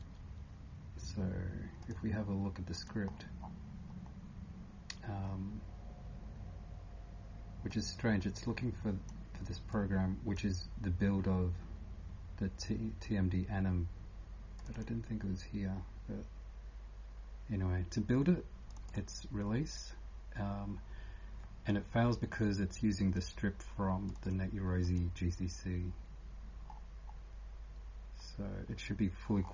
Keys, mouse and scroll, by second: 3.1 scroll down 1, 3.8 scroll down 1, 3.8-5.5 typing, 5.0 scroll down 11, 7.7 click, 7.7 scroll up 4, 11.4 scroll down 10, 18.7 click, 18.9 click, 24.8-29.5 click, 25.4 scroll up 1, 26.6-27.3 scroll up 6, 29.0-29.5 scroll up 5.